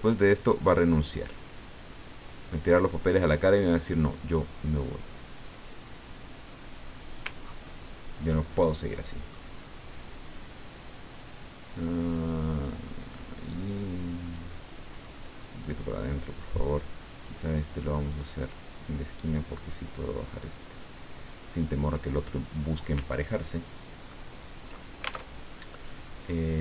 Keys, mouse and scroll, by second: 1.8-3.6 drag, 4.4-7.4 drag, 7.4 ctrl+scroll down 1, 8.6-9.9 ctrl+middle drag, 12.7-14.6 drag, 15.0-16.3 drag, 18.1 click, 19.4-21.0 drag, 23.1 ctrl+scroll down 2, 24.1 ctrl+middle click, 25.4 ctrl+alt+Tab.